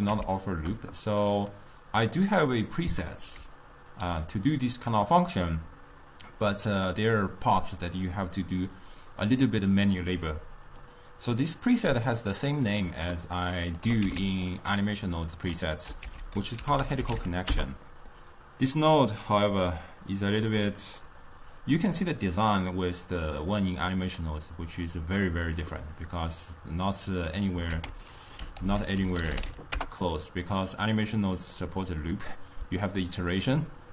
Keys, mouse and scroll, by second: 1.4 click, 12.7 middle click, 13.5 click, 13.9 g, 14.6 click, 15.1-16.1 middle drag, 16.1 ctrl+a, 23.0-27.8 drag, 27.8 s, 28.6 ctrl+a, 31.6-33.9 middle drag.